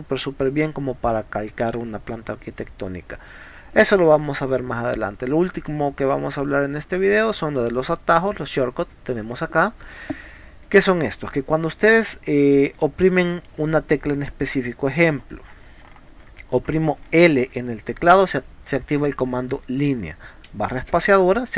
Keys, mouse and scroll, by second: 6.9 click, 12.7 click, 13.5 middle click, 15.2-15.5 scroll down 2, 16.2 scroll up 2, 17.4 l, 21.0 space.